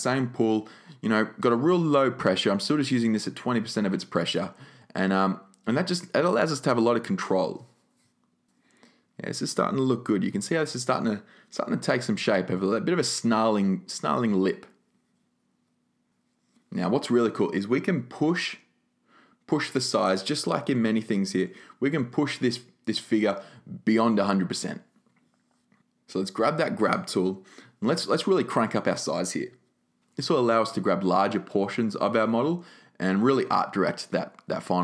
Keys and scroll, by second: 28.1-29.1 typing.